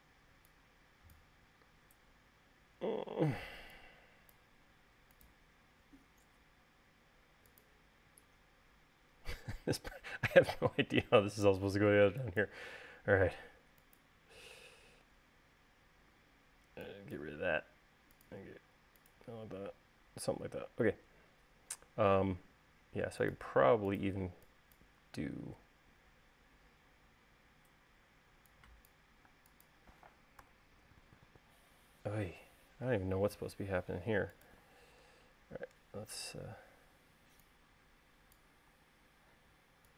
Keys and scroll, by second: 0.6 e, 5.2 l, 8.7 e, 18.0 l, 20.3 space, 24.8 e, 28.9 e, 30.0 space, 31.2 BackSpace, 33.2 l, 37.9 e.